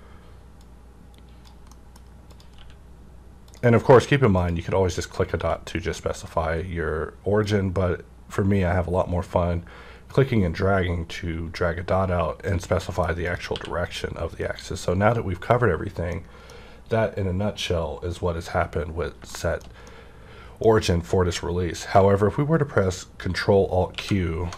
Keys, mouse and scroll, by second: 0.6-2.3 drag, 1.7 middle click, 3.4 click, 3.4 q, 4.4 click, 5.4 q, 6.1 click, 6.6-7.4 scroll up 1, 7.4-13.3 drag, 12.8 middle click, 13.5 q, 16.1-18.9 middle drag, 16.1 q, 19.1 middle click, 19.1 q, 19.3-24.5 shift+middle drag, 23.9 ctrl+alt+q.